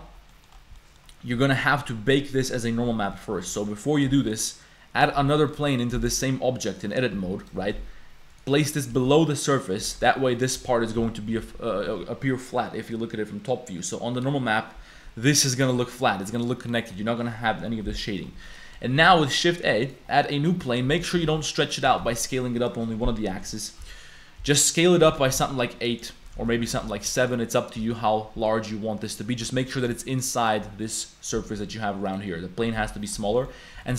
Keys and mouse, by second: 0.3 click, 0.8 click, 3.0 click, 3.5 click, 3.8 click, 4.3 shift+a, 5.2 Tab, 5.6 a, 6.9 click, 7.1 s, 7.6 g, 8.5 click, 8.9 s, 9.9 Tab, 10.0 middle click, 11.0 KP_7, 11.4 a, 15.9 click, 16.4 click, 18.0 click, 18.4 click, 19.0 shift+a, 20.2 click, 20.5 click, 20.9 Tab, 21.2 s, 21.8 s, 23.8 \, 24.4 KP_7, 25.0 s, 26.4 ctrl+z, 26.6 s, 27.8 Tab, 29.4 z, 29.9 click, 30.1 click, 30.4 click, 30.6 g, 31.6 z, 32.1 click, 32.7 click, 33.3 click.